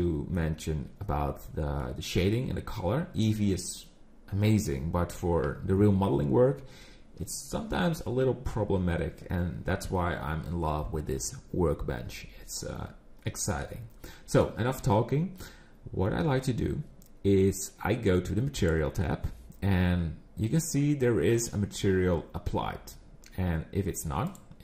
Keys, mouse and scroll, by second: 13.3-16.4 scroll down 2, 18.6 click, 24.2 click.